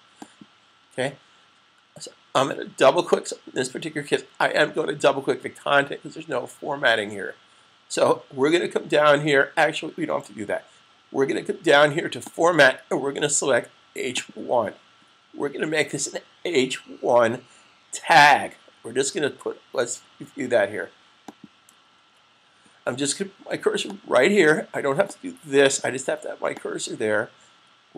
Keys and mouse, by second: 12.2 click, 21.0 click, 21.8 super+z, 23.6 click.